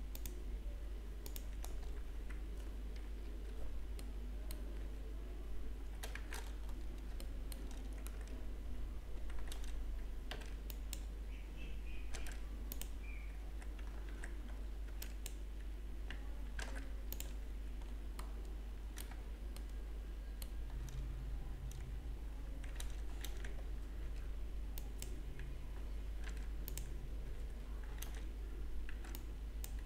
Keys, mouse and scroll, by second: 0.2 click, 1.4 click, 2.2 g, 4.6 middle click, 5.6 z, 6.2 shift+z, 6.7-7.4 scroll up 2, 7.4 shift+middle click, 9.6 alt+a, 10.6 b, 12.1 alt+m, 14.1 alt+a, 14.9 b, 16.6 alt+m, 17.7-19.0 scroll down 5, 19.0 middle click, 19.9 shift+middle click, 21.6-22.6 scroll up 2, 22.8 a, 24.1 b, 26.2 alt+m, 27.3 a, 28.1 alt+a, 29.7 b.